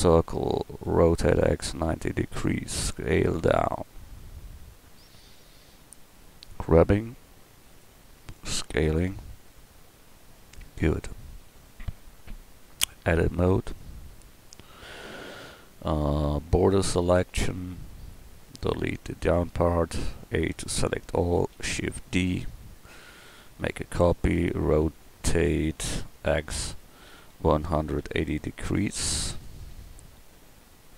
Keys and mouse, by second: 1.0 r, 2.7 s, 6.8 g, 8.2 s, 10.1-13.3 drag, 13.3 Tab, 14.8 a, 16.0 b, 18.6 x, 20.0 a, 21.4 shift+d, 24.7 e.